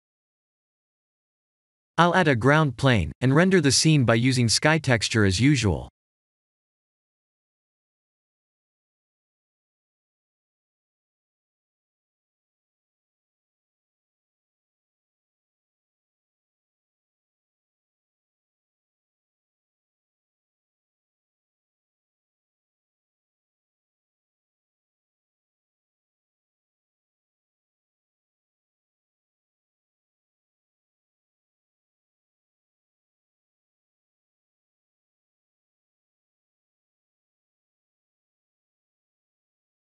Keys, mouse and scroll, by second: 0.6 click, 1.5-1.9 scroll down 2, 2.0 shift+a, 2.9 s, 3.5 click, 4.2 s, 4.9 click, 5.4 middle click, 7.2 ctrl+alt+KP_0, 8.0 shift+`, 8.3 w, 8.8 w, 8.9 w, 10.9-11.9 s, 13.2 click, 14.0 click, 16.2 click, 17.5 click, 20.0-20.5 scroll down 2, 20.9 click, 23.1 click, 26.7 click, 27.8 click, 28.8 click, 29.5 click, 32.3 click, 33.7-34.7 scroll down 2, 34.7 click.